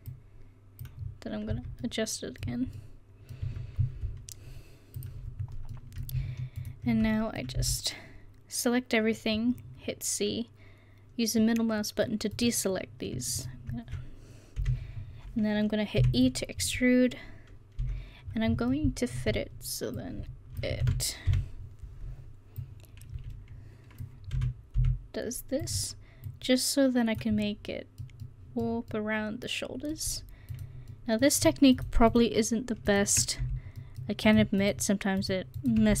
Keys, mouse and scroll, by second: 1.6 Tab, 1.8-2.8 middle drag, 3.5 Tab, 5.4 middle click, 7.6 c, 14.6 KP_1, 16.0 e, 17.8 KP_3, 20.0 click, 20.9 ctrl+z, 21.3 o, 24.4 s, 26.3-27.5 drag, 27.5 middle click, 31.0-33.5 middle drag, 33.5 f, 33.9-36.0 middle drag.